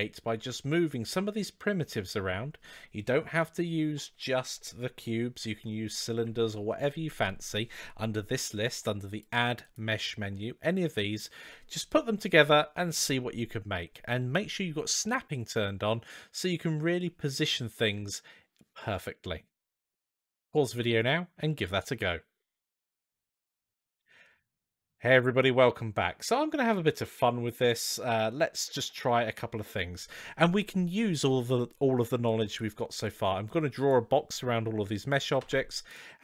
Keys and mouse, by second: 9.0-26.2 drag, 27.1-28.2 middle drag, 30.8-31.3 middle drag, 32.1 click, 33.4-33.7 drag, 35.2-36.2 typing.